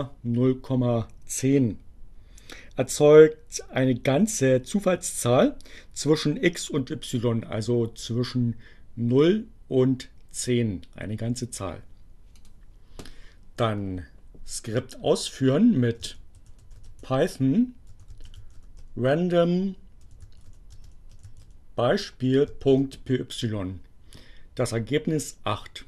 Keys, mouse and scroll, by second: 11.2-12.7 drag, 15.3-22.1 typing.